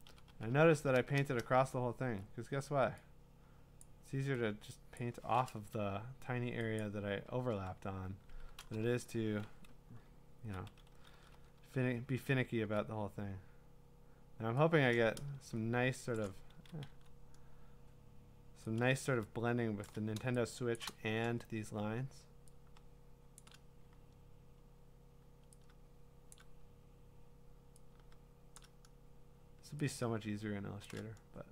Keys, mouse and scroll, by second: 2.0 ], 3.8 click, 5.0 click, 6.8 click, 8.7-11.5 typing, 12.6 [, 16.1 shift+click, 16.5 ctrl+z, 16.9 x, 19.8 shift+click, 20.7 click, 23.4 shift+click, 23.7 shift+click, 26.3 shift+click, 28.6 shift+click, 30.8 shift+click.